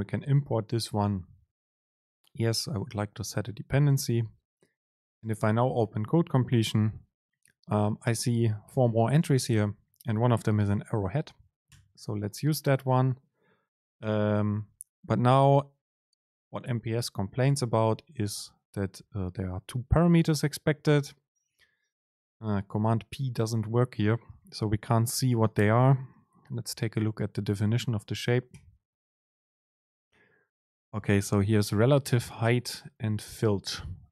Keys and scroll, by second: 5.4 super+space, 12.9 Right, 14.1 Right, 22.3 super+p, 28.9 super+b.